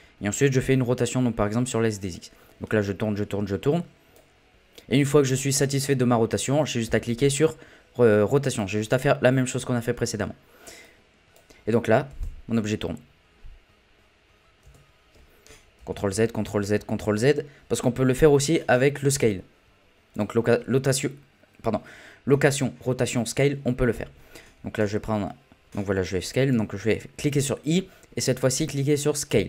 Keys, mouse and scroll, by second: 0.9-2.1 middle drag, 2.1 click, 6.9 i, 10.8-12.1 drag, 12.1 space, 14.6 space, 15.8 ctrl+z, 16.1 ctrl+z, 16.4 ctrl+z, 16.8 ctrl+z, 17.1 ctrl+z, 20.1-23.3 drag, 27.2 i.